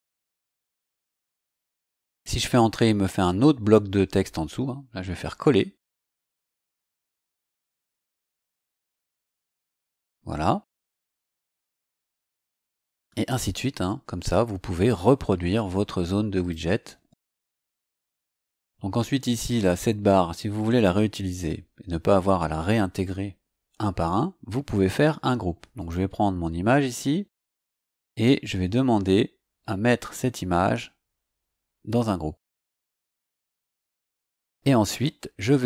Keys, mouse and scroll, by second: 0.7 Return, 5.2 ctrl+v, 9.3-9.7 scroll up 2, 10.6 click, 12.1 click, 13.3-14.0 scroll down 4, 16.3 click, 20.0-20.9 scroll down 3, 21.4-22.4 scroll up 3, 25.7 click, 27.9 click, 33.0 click, 35.5-35.6 scroll down 2.